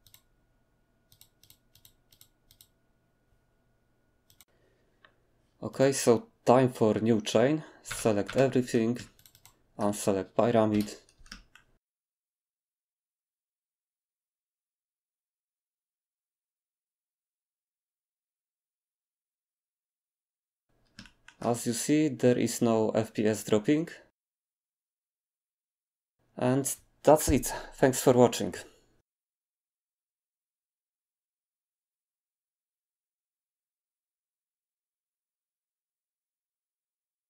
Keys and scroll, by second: 7.9 a, 8.3 a, 10.7 7, 11.9 alt+d, 11.9-17.9 typing, 12.2 alt+d, 12.6 alt+d, 13.7 alt+d, 14.2 alt+d, 14.7 alt+d, 15.7 alt+d.